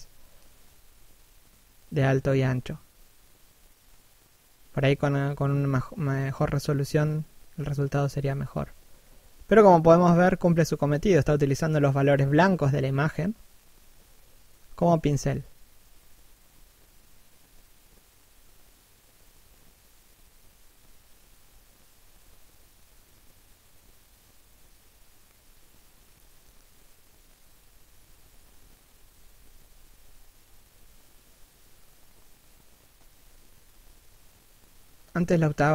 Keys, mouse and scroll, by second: 2.2 middle click, 2.9 middle click, 4.2 shift+click, 7.5-7.9 scroll up 1, 7.9 shift+click, 12.9 middle click, 13.6-14.0 scroll down 1, 14.0 shift+middle click, 16.9 shift+click, 20.0 middle click, 21.1 shift+middle click, 22.5-23.5 scroll up 1, 25.0-25.5 scroll down 2, 25.5 shift+middle click, 26.2 shift+click, 29.5 middle click, 35.3 middle click.